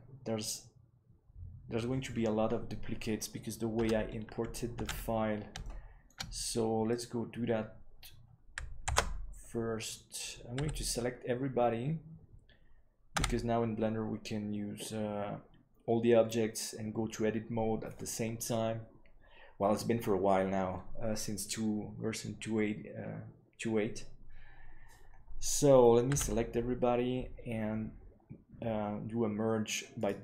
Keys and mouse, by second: 3.9 Tab, 4.9 ctrl+s, 5.6-6.0 shift+middle drag, 9.9 alt+c, 10.6 a, 29.9-30.2 drag.